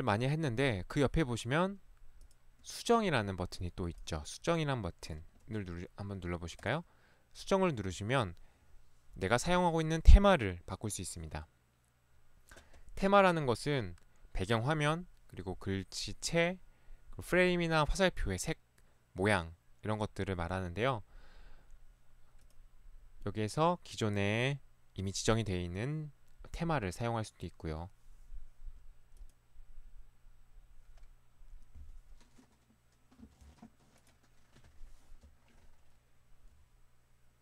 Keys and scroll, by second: 5.5 Escape, 5.6 ctrl+1.